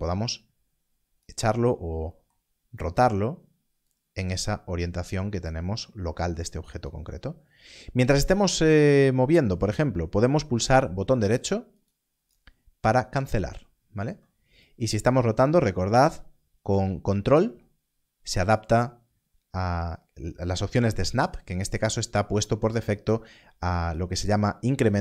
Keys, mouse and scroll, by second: 3.8 click, 6.5 click, 11.8 click, 14.6 click.